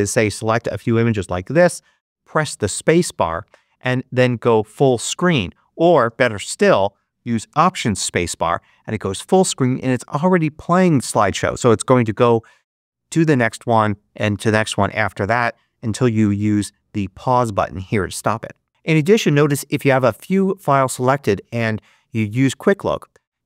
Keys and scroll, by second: 1.9 shift+space, 5.9 space, 7.9 alt+space, 18.7 Escape.